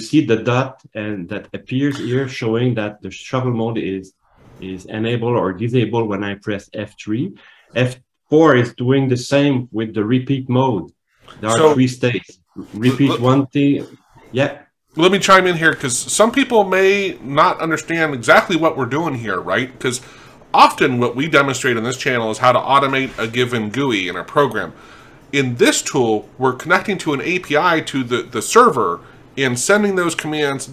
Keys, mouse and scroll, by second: 11.4 F4.